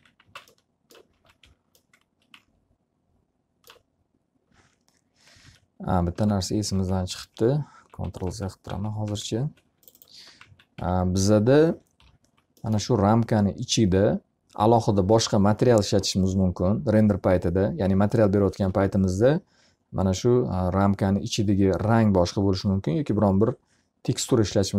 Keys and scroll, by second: 0.3 alt+r, 0.7 x, 0.9 z, 1.1 alt+a, 2.1 F3, 5.9 ctrl+z, 10.8-11.6 typing, 12.7 l.